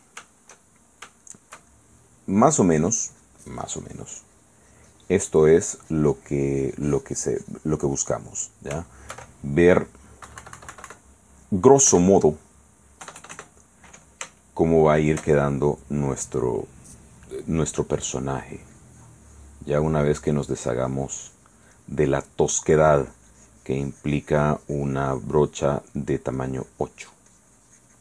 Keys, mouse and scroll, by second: 0.5 shift+middle click, 1.4 shift+middle click, 2.6-8.5 shift+drag, 8.6 shift+click, 9.7 shift+click, 10.5 KP_Subtract, 11.3 click, 12.1 KP_1, 13.2 KP_Add, 14.6 shift+click, 18.0-19.9 drag, 20.0 click, 20.4-22.1 drag, 22.2 middle click, 23.0-26.1 drag, 26.2 middle click, 26.6-28.0 drag.